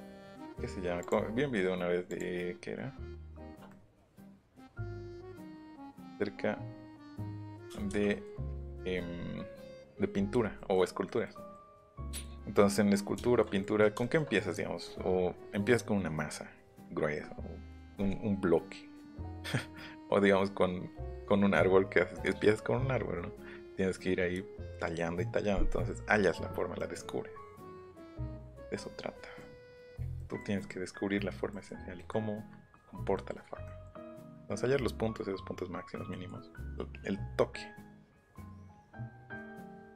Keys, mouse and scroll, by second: 0.4 shift+click, 1.0 shift+click, 2.1 shift+click, 3.2 shift+click, 3.8-4.3 scroll up 2, 4.6-7.0 drag, 7.2 scroll up 2, 7.6-8.1 scroll down 4, 7.9 Escape, 8.1 scroll up 2, 8.2 scroll down 2, 8.8-9.2 scroll up 1, 10.5-11.2 scroll down 2, 11.4 scroll up 1, 11.5 scroll down 1, 12.0 scroll down 1, 13.0 middle click, 25.9 middle click, 26.7 middle click, 27.6 middle click, 27.9 middle click, 29.6 middle click, 30.1 middle click, 36.4 middle click.